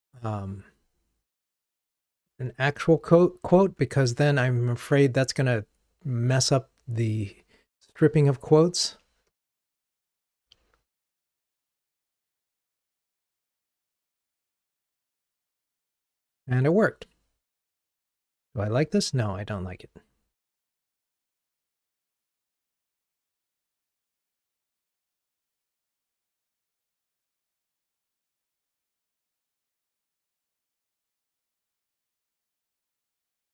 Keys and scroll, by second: 8.9 ctrl+r, 26.6 alt+Up, 27.2 alt+Up, 29.1 alt+Up, 29.3 alt+super+v.